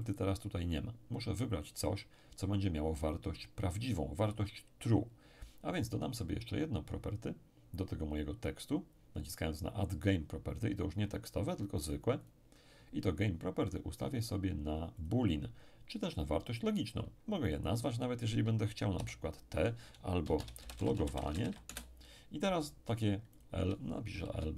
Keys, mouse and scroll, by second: 12.2 click, 14.2 click, 17.5 click, 18.9 shift+t, 20.2-21.4 typing, 21.7 Return, 23.3 click, 24.1 l.